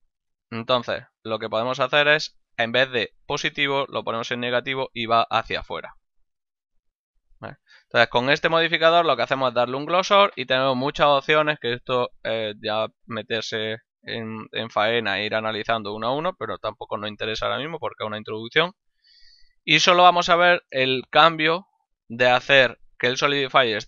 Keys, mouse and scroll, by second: 0.2 click, 0.6 middle click, 1.0 ctrl+middle click, 2.4 click, 7.3 middle click, 7.9 shift+middle click, 8.2 middle click, 19.9 z, 20.8 middle click.